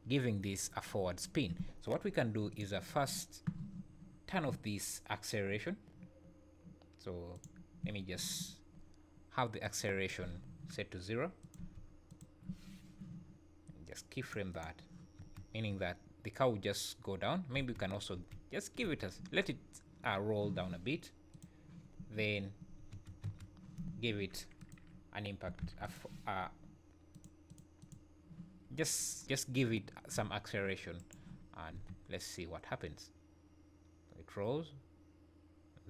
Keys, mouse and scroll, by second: 2.5 click, 7.4 click, 9.6 click, 14.2 click, 14.6 click, 15.1 space, 18.8 space, 21.3 click, 22.9 space, 23.2 space, 24.5 click, 27.1 click, 30.9 shift+right click, 31.5-31.8 scroll down 3, 31.8 space.